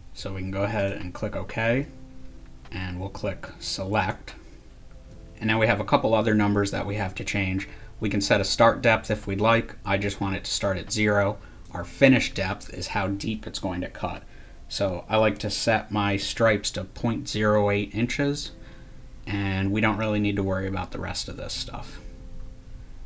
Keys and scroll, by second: 21.5-22.2 typing.